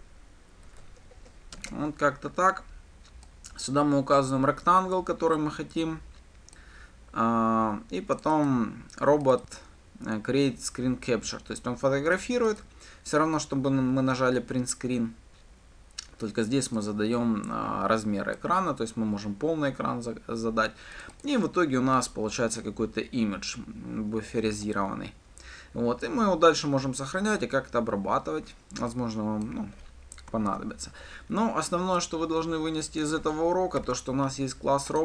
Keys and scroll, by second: 0.4 Tab, 31.1 ctrl+/.